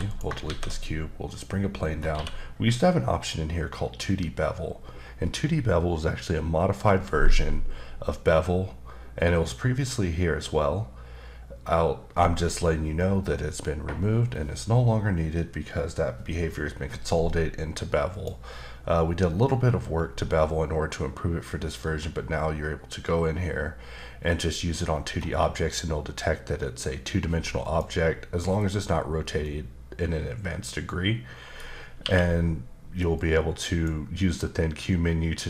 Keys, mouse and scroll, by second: 0.0 click, 0.4 shift+a, 1.2 click, 1.8-2.1 scroll up 2, 2.1 q, 18.1 click, 19.9-22.2 scroll up 3, 24.9-27.2 scroll up 2, 27.6 click, 29.4 middle click, 32.0 q, 33.2 click.